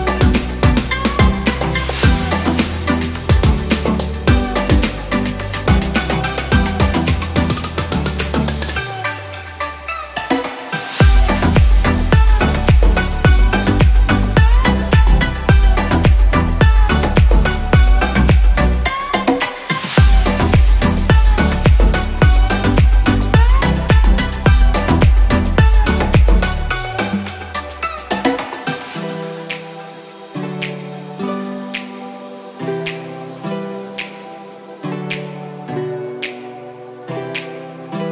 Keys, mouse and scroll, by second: 0.0 shift+a, 5.0 ctrl+z, 14.6 ctrl+z, 15.5 ctrl+z, 28.1 ctrl+z, 35.5 ctrl+z, 36.3 ctrl+z.